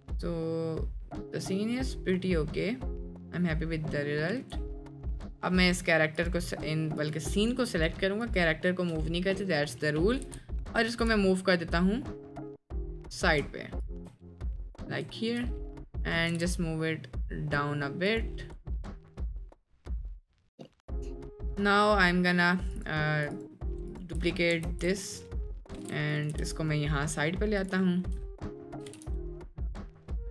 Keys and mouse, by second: 4.3 space, 5.0-5.3 middle drag, 7.1 click, 9.5 middle click, 10.2 g, 10.9 g, 14.3-14.9 middle drag, 15.2 shift+middle drag, 15.7 middle click, 16.4 g, 19.4 click, 20.3-20.9 drag, 21.4-21.9 middle drag, 24.7 alt+d, 25.7 g, 26.3 g, 27.9 shift+middle drag, 28.8 g.